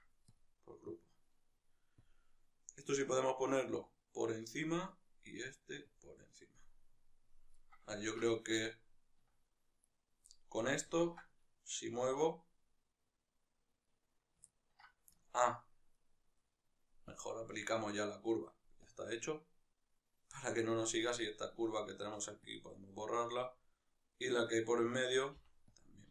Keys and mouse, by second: 0.3 ctrl+p, 0.6 right click, 3.6-4.6 drag, 4.6-5.7 right drag, 5.7-6.3 drag, 6.3-9.6 middle drag, 9.6-10.0 right drag, 10.0-13.7 middle drag, 11.8 g, 13.7 right click, 14.2-15.7 ctrl+middle drag, 15.7 right click, 16.9 click, 17.6-18.6 right drag, 18.6-20.1 drag, 20.1 right drag, 20.9 right click, 22.2 x, 23.2 right click, 23.9 right click, 25.5 x.